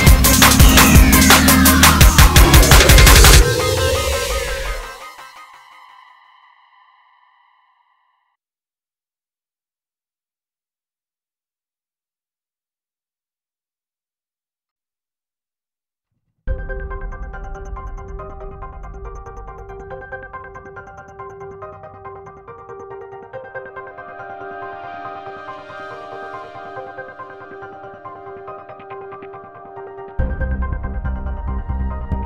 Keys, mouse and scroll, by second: 0.0 click, 0.2 click, 0.2 middle click, 0.6 ctrl+r, 0.6 click, 0.7 click, 0.9 click, 1.0 middle click, 1.2 click, 1.3 middle click, 1.5 shift+click, 1.6 middle click, 1.7 shift+click, 2.0 click, 2.3 click, 2.4 click, 2.4 middle click, 2.7 shift+click, 2.8 middle click, 2.8 shift+click, 3.0 ctrl+e, 3.1 click, 3.2 click, 3.4 middle click, 3.7 click, 3.8 middle click, 4.1 click, 4.3 middle click, 4.4 click, 4.5 middle click, 4.8 shift+click, 4.9 middle click, 5.2 middle click.